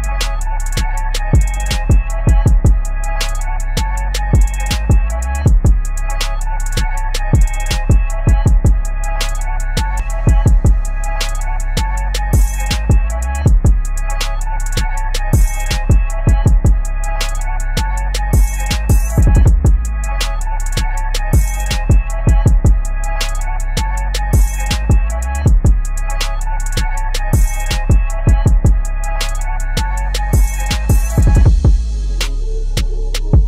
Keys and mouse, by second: 1.4 ctrl+d, 2.1 ctrl+click, 2.8 ctrl+g, 3.5 ctrl+[, 4.2 click, 5.1-7.2 typing, 8.5-9.3 typing, 9.4 click, 11.6 space, 17.4 click, 18.1 ctrl+a, 18.3-20.9 typing, 21.8 Down, 22.4 Return, 23.6 click, 27.8 click.